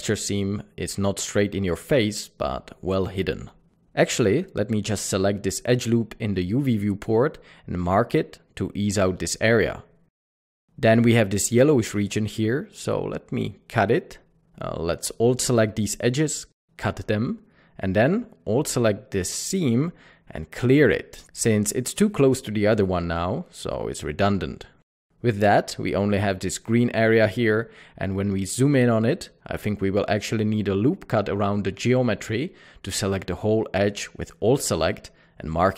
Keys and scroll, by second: 0.0 typing, 4.0-4.7 typing, 7.0-7.8 typing, 14.6 typing, 21.4 typing, 23.9-24.8 typing, 24.9 alt+a, 27.8 alt+a, 34.3 typing.